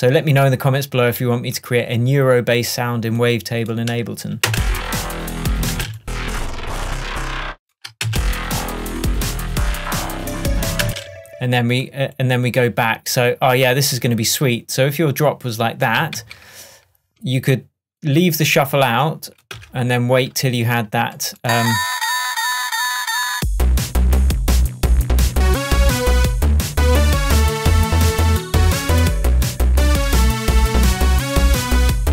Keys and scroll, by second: 4.6 space, 5.8 space, 8.7 shift+Tab, 10.9 space, 16.3 super+d, 19.6 BackSpace.